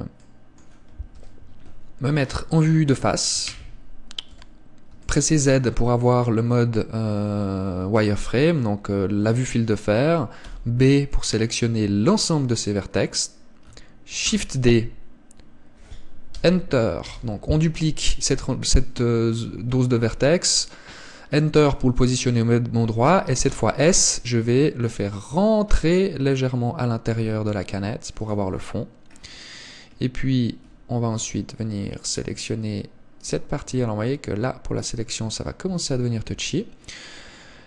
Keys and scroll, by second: 1.4 KP_1, 14.6 shift+d, 36.0 Tab.